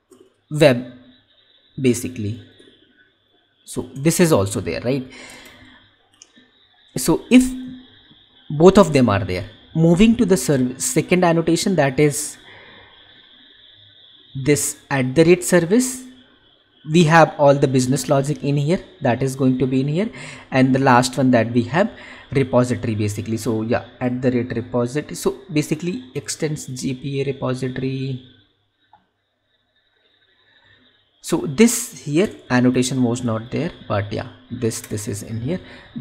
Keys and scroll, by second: 3.5 Down, 5.8 ctrl+/.